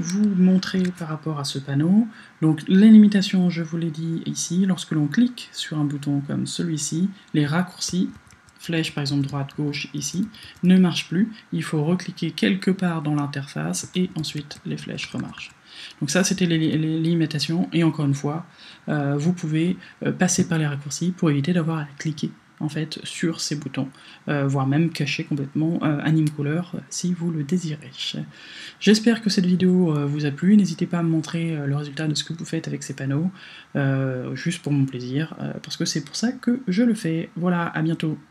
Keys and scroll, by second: 0.6 super+d, 7.9 Right, 8.7 Left, 14.2 Right, 14.8 alt+Right, 16.2 alt+Left.